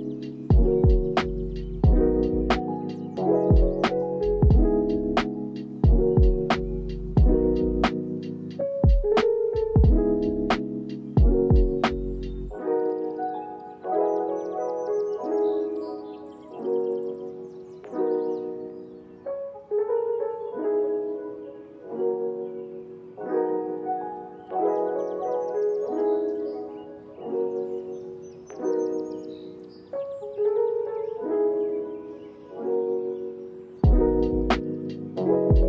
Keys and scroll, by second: 3.7 ctrl+a, 5.3 ctrl+s, 7.7 ctrl+s, 10.1 ctrl+a, 10.7 u, 13.7 l, 13.8 o, 14.1 p, 14.6 Down, 15.3 Return, 28.1 ctrl+v, 33.0 ctrl+v, 34.6 ctrl+v, 35.2 ctrl+v.